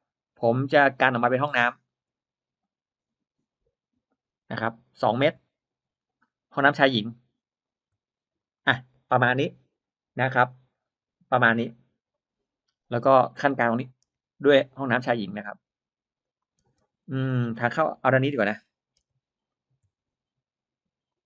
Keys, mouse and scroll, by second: 0.4 click, 4.1 2, 5.2 Return, 7.5 shift+click, 13.0 space, 14.0 l, 14.7 click, 14.9 l, 16.1 click, 16.5 space, 16.9-17.2 scroll up 1, 17.0 middle click, 17.6 click, 17.8 middle click, 17.8 click, 18.9 m, 19.4 click, 21.0 click.